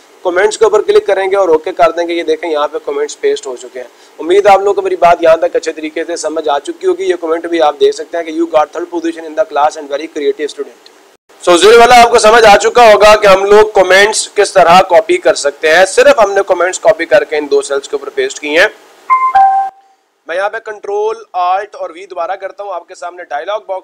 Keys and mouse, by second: 0.4-2.6 drag, 12.9-14.0 drag, 14.9-15.9 drag.